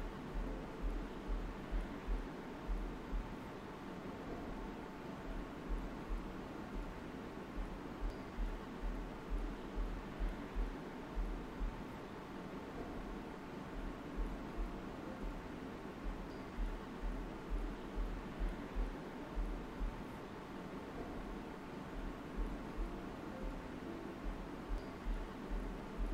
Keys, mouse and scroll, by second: 0.2 click, 4.9 alt+right click, 5.3 space, 5.8 right click, 7.4 shift+click, 8.5-12.0 alt+right drag, 12.3 alt+right click, 13.7 alt+click, 14.2 space, 14.3 click, 14.7 space, 15.3 click, 15.8 ctrl+d, 16.3 space, 16.5 click, 16.9 space, 18.1-19.7 right drag, 19.7 click, 23.9 alt+right click.